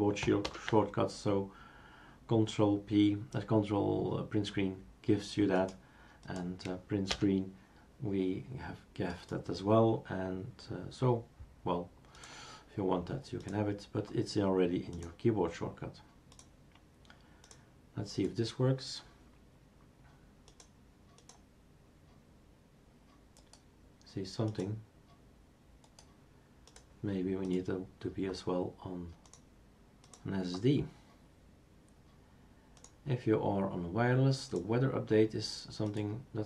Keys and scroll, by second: 0.4 ctrl+Print, 7.1 Print.